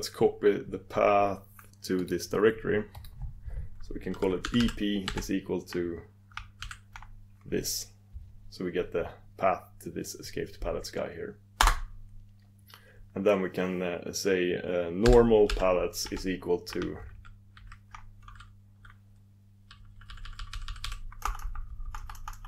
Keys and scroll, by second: 3.2 super+d.